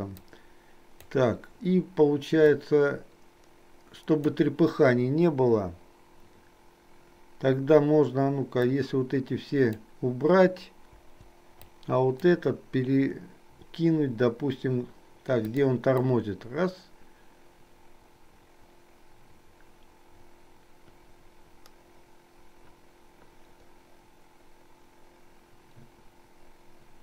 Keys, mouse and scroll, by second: 0.3 click, 2.7-4.4 drag, 8.8-9.8 drag, 11.0 Delete, 11.7 click, 15.5 click, 16.2-27.0 drag.